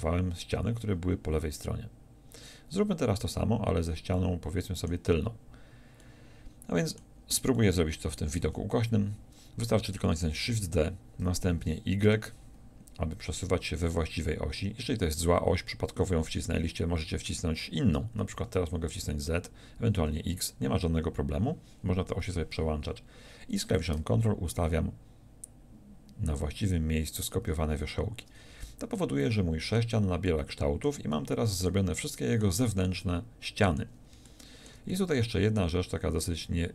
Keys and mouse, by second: 8.4 z, 10.5 shift+d, 23.9-27.3 middle drag, 28.5 a.